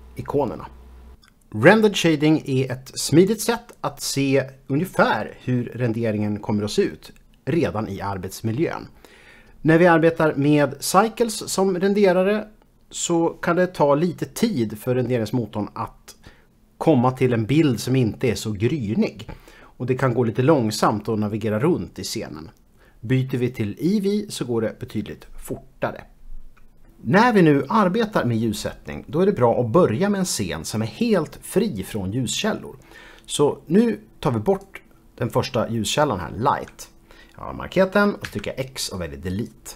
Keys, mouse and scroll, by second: 11.6 middle click, 14.0 middle click, 15.4 middle click, 18.0 KP_0, 20.3 click, 21.0 click, 24.2 middle click, 25.0 middle click, 25.9 middle click, 27.3 KP_0, 35.5 click, 38.4 x, 39.4 click.